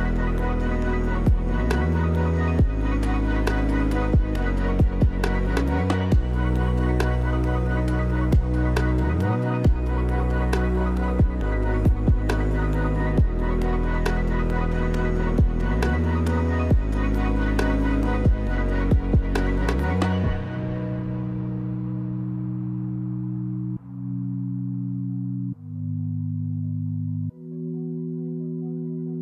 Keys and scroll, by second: 5.2 space, 6.7 space, 12.5 space, 17.2 space, 18.9 space, 20.4 space, 21.3 space, 27.6 space.